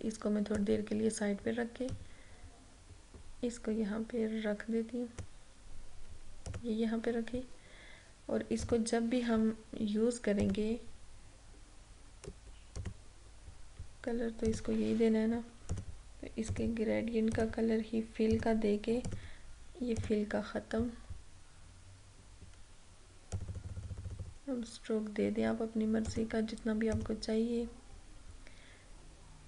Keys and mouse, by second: 12.9 click, 23.3 click.